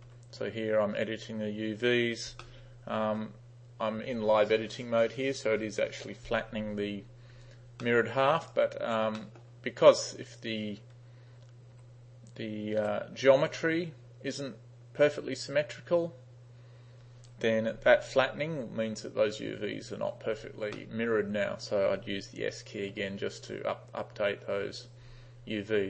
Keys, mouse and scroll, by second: 0.0-0.1 typing, 2.5-3.2 middle drag, 7.9-8.3 middle drag, 8.5 right click, 9.2 middle click, 12.6-13.4 typing, 17.4 u, 20.8-21.1 middle drag, 23.0 s, 24.2 s.